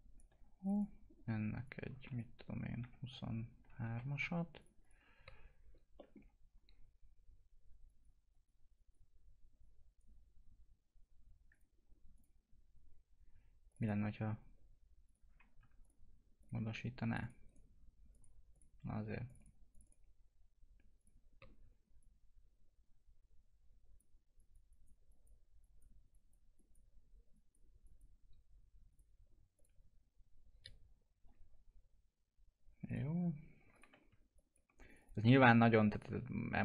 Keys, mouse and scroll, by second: 0.6 click, 2.8 2, 4.3-5.0 typing, 4.6 click, 5.9 middle click, 6.2 F2, 7.8 click, 15.8 ctrl+click, 17.4 right click, 18.1-24.3 drag, 24.3 click, 32.8 click, 34.9 click, 35.2 right click, 36.0 click.